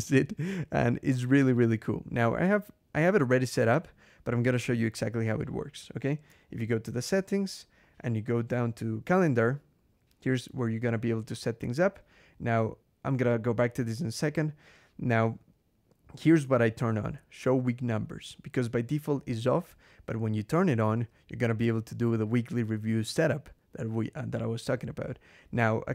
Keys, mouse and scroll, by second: 6.4 ctrl+,, 7.5 scroll down 2, 10.1 click, 13.1 click, 13.9-14.3 scroll down 2, 15.4 scroll down 2, 25.6 scroll down 2.